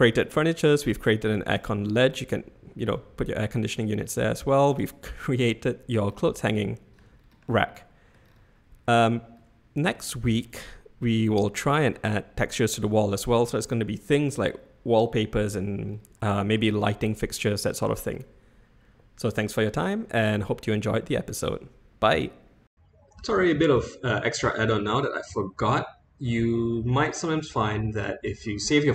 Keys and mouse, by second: 0.1 click, 1.3 Tab, 1.6 click, 3.7-4.0 shift+drag, 4.7 click, 5.4-5.9 middle drag, 6.4-7.0 shift+middle drag, 7.8-8.1 middle drag, 9.4-9.9 middle drag, 10.5-11.7 shift+middle drag, 16.3 middle drag, 17.3-18.1 middle drag, 22.7 middle click, 27.3-28.0 shift+middle drag.